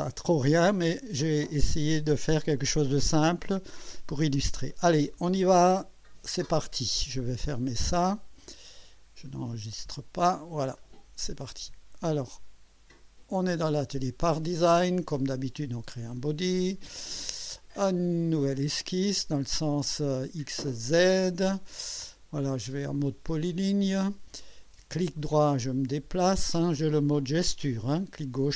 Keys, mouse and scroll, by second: 7.8 click, 9.8 click, 10.8 click, 15.2 click, 17.1 click, 18.4 click, 21.0 click, 23.3 click, 24.9-26.5 right drag.